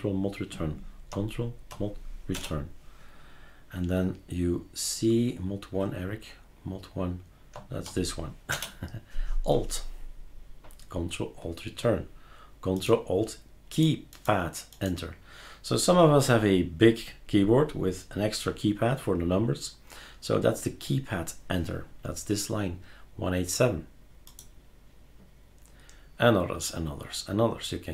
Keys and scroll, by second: 2.3 ctrl+super+Return, 8.5 ctrl+alt+Return.